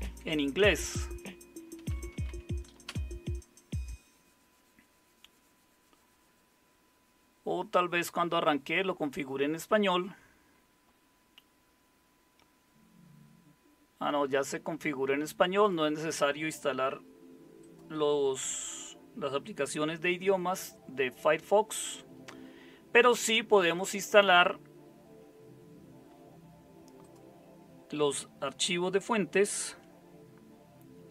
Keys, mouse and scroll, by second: 1.5-2.7 typing, 30.9 super+7.